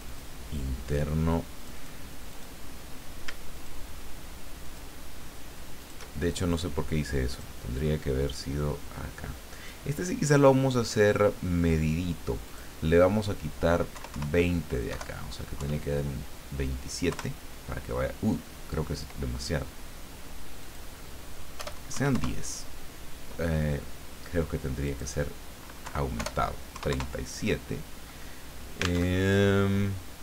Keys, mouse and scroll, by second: 1.6 click, 2.3 click, 3.6 shift+click, 4.6 shift+click, 5.8 shift+click, 6.5 click, 7.3 click, 8.2-9.9 drag, 12.5 click, 13.9 Left, 14.9 Delete, 15.5 KP_2, 17.1 KP_Enter, 20.6 click, 21.6 BackSpace, 22.0 KP_1, 22.1 KP_Enter, 24.9 click, 25.8 Left, 26.2 BackSpace, 26.9 KP_Enter, 29.1 alt+Tab.